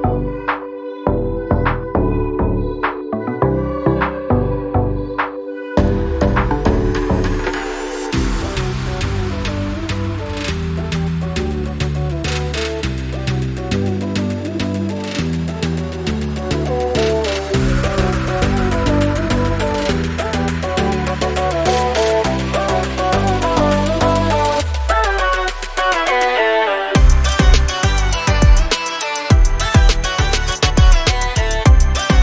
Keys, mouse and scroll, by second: 0.2 click, 0.9 z, 1.4 scroll up 1, 3.0 click, 6.2-6.5 scroll down 1, 7.9 click, 8.9 ctrl+click, 11.0 click, 13.3 scroll up 1, 14.3 click, 15.4 alt+scroll down 2, 16.4 alt+scroll down 2, 18.6 click, 23.6 z, 24.5 click, 25.0 click, 26.8 scroll up 1, 27.9 click, 31.7 ctrl+z.